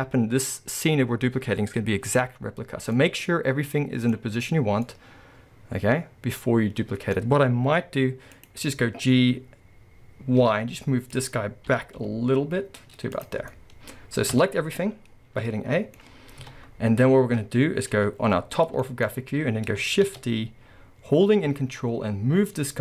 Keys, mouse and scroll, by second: 1.8-2.9 scroll up 1, 4.5-4.9 scroll up 2, 8.3 click, 10.4 y, 11.1 click, 11.7 g, 13.5-16.4 middle drag, 14.4 a, 14.5 scroll down 2, 16.4 KP_7, 17.0-17.8 scroll down 1, 18.8 shift+middle click, 19.1-20.1 scroll up 1, 20.1 shift+d.